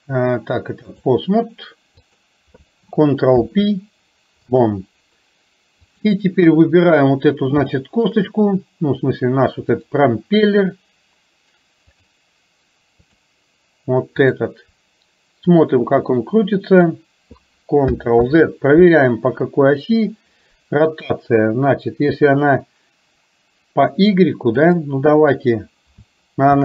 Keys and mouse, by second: 2.1 click, 3.3 ctrl+p, 6.1 click, 6.6 KP_1, 7.8 shift+middle click, 9.8 click, 12.1-13.3 drag, 14.3 click, 15.7-16.9 drag, 18.3 ctrl+z, 24.8-26.6 drag.